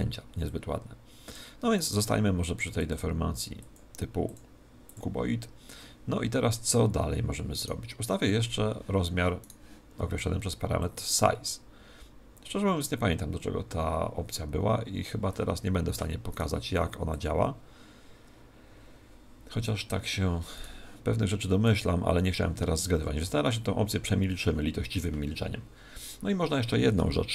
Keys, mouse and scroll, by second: 0.4 click, 1.7 right click, 2.7-6.1 drag, 7.5-11.1 right drag, 10.7 click, 16.3 right click, 17.1 click, 20.5 right click, 21.6-23.3 drag.